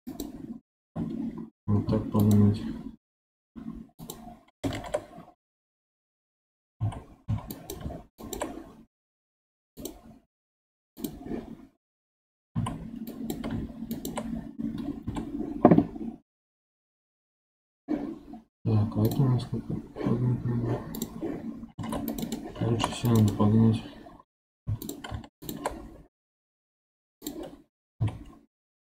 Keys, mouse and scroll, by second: 0.0 click, 1.8 2, 2.1 click, 3.3 x, 4.6 ctrl+z, 6.7 1, 7.1 2, 7.4 click, 9.7-12.4 drag, 12.4 1, 13.0 click, 13.8 shift+click, 14.9 j, 21.7 ctrl+r, 22.6 ctrl+r, 24.5 2, 24.7 click, 25.3 shift+click, 27.1 click, 27.9 1.